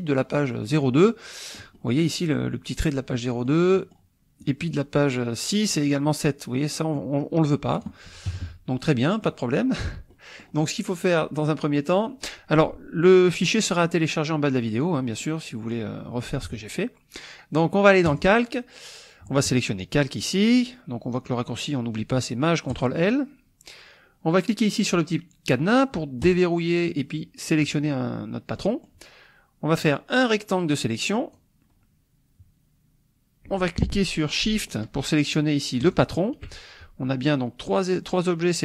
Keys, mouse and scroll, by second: 0.6 click, 1.2-2.2 drag, 3.1-3.7 drag, 3.8 click, 4.0 middle drag, 7.7 click, 8.3 KP_Subtract, 9.0 click, 9.3 middle click, 9.5 click, 9.5 middle click, 10.1 click, 10.3 middle click, 18.1 click, 22.8 click, 26.2-26.7 drag, 28.6 middle click, 28.7 click, 28.8 middle drag, 29.9-31.5 drag, 35.8 shift+click.